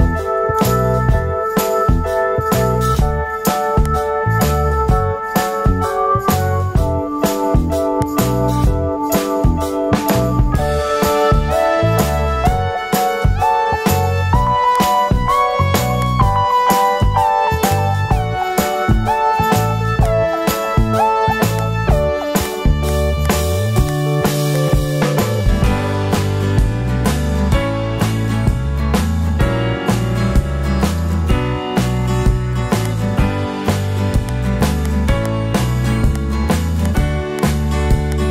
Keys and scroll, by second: 25.5 alt+super+z, 25.7 alt+super+z, 25.9 alt+super+z, 26.3 alt+super+z, 26.6 alt+super+z, 26.9 alt+super+z, 27.3 alt+super+z, 29.5 alt+super+z.